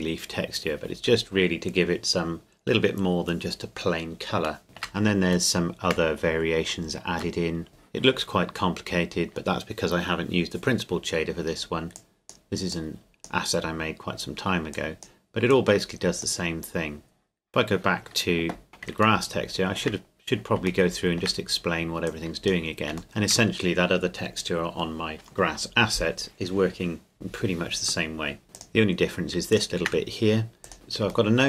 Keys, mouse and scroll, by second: 4.6 shift+middle click, 7.4 shift+middle click, 7.7-9.5 scroll up 2, 11.9-18.4 drag, 18.7 right click, 19.2 shift+middle click, 19.9-20.5 scroll down 3, 20.9-22.1 shift+middle drag, 22.1 click, 23.0 shift+middle click, 28.5 click, 29.5 shift+click, 30.6 click, 30.7 scroll up 2, 31.3 shift+middle click.